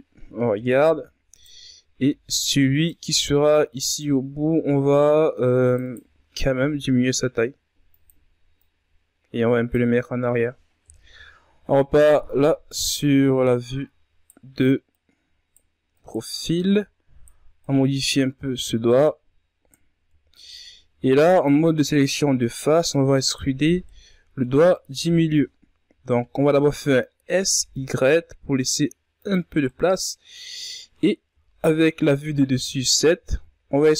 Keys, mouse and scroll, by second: 0.3-0.6 shift+scroll up 3, 0.7 z, 1.4 right click, 2.7 b, 3.9 c, 5.9 z, 6.5 s, 8.5-9.9 drag, 9.9-10.8 scroll down 4, 10.8 KP_3, 11.5-12.0 ctrl+scroll down 4, 12.0-12.4 scroll up 4, 13.4 right click, 14.9 right click, 15.9 right click, 16.5 right click, 17.6 right click, 18.8 right click, 21.4 ctrl+Tab, 21.9 right click, 22.3 shift+right click, 22.8 shift+right click, 23.1 shift+right click, 23.6 scroll down 2, 23.9-25.0 middle drag, 25.0 KP_3, 26.0-26.4 scroll up 2, 26.4 s, 29.5 scroll down 1, 29.6 middle click, 30.5 scroll up 2, 31.3 KP_7, 32.2-33.4 shift+scroll up 4, 33.4 e.